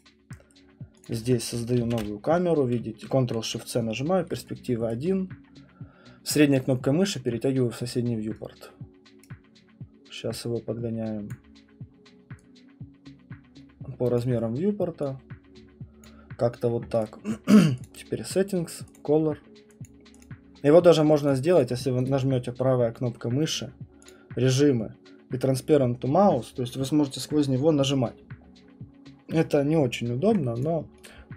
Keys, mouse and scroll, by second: 0.0 right click, 1.0 click, 4.5 right click, 4.5 click, 4.9 right click, 7.3 scroll, 9.1 scroll, 9.2 right click, 11.3 click, 14.3 click, 16.0 click, 17.0 right click, 17.8 click, 19.8 click, 20.2 click, 21.3 click, 21.6 click, 22.1 right click, 24.1 click, 30.7 click, 31.1 click.